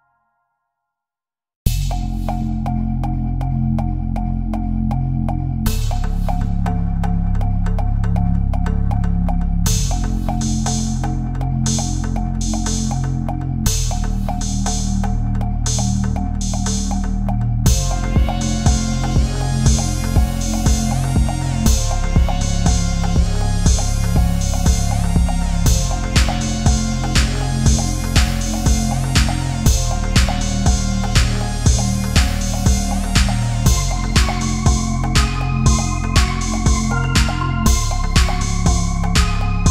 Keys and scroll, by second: 1.0 Right, 1.1 Up, 1.6 Down, 1.7 Left, 1.8 Right, 2.0 Up, 2.2 Up, 3.9 ctrl+c, 4.1 ctrl+v, 4.2 ctrl+z, 4.7 ctrl+c, 7.1 Right, 7.3 Down, 7.5 space, 8.4 ctrl+v, 9.4 Down, 9.5 Right, 9.6 Up, 10.1 Up, 10.3 Down, 10.5 Down, 10.7 Up, 11.3 Left, 11.4 Up, 11.5 Left, 11.6 Right, 12.5 ctrl+c, 13.4 ctrl+v, 14.5 ctrl+z, 15.5 Down, 15.6 Up, 15.9 ctrl+v, 16.7 ctrl+c, 17.7 ctrl+c, 17.9 ctrl+v, 18.7 ctrl+v, 20.0 Down, 20.2 Right, 21.8 Down, 22.1 Down, 22.6 Up, 23.0 Right, 23.1 Left, 23.5 Right, 24.5 Up, 24.9 Left, 25.4 Down, 25.8 Up, 26.1 Up, 26.3 Down, 26.6 Up, 27.0 ctrl+-, 27.1 ctrl+0, 27.2 ctrl+=, 27.4 space, 28.0 ctrl+=, 28.1 space, 29.5 ctrl+z, 33.4 Delete, 34.6 ctrl+-, 34.7 space, 35.0 ctrl+-, 35.0 ctrl+=, 36.3 ctrl+0, 36.6 ctrl+=, 36.8 space, 37.8 ctrl+a, 38.3 ctrl+z, 39.0 space.